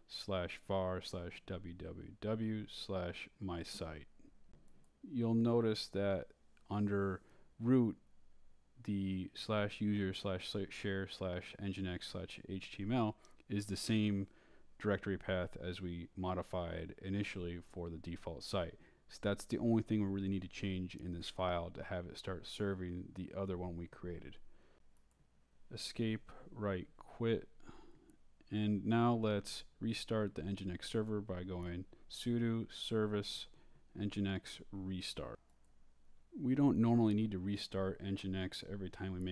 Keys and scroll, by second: 0.6 Left, 8.5 shift+r, 9.8-13.7 typing, 15.6 m, 17.7-19.8 typing, 22.1 ;, 23.3 space, 24.6 Escape, 24.9 shift+;, 27.6-28.4 typing, 28.6 Return, 29.8-35.7 typing, 35.8 Return.